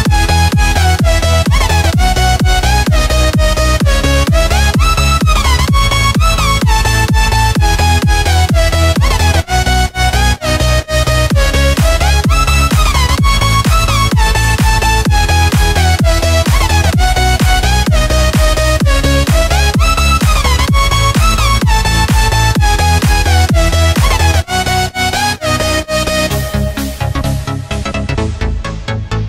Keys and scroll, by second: 1.5 super+c, 8.6 super+f, 9.4 Right, 10.1 space, 11.3 Tab, 11.8-12.5 typing, 15.9 a.